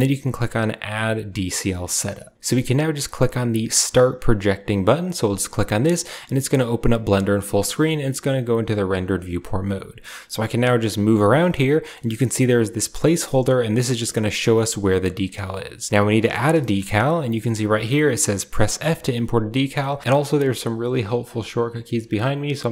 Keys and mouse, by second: 10.4-22.7 middle drag.